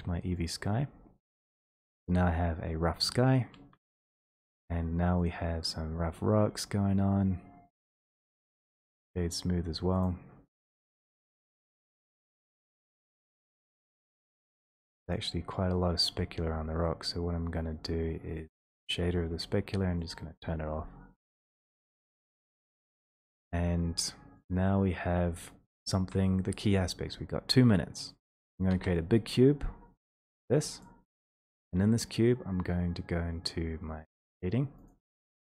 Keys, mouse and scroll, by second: 0.5 click, 3.7 middle click, 5.3 click, 6.6 scroll, 8.0 right click, 8.9 click, 10.8 right click, 11.7 click, 13.1 click, 13.1 right click, 13.7 click, 15.0 click, 16.8 click, 18.5 click, 26.2 alt+middle click, 28.6 click, 30.8 click.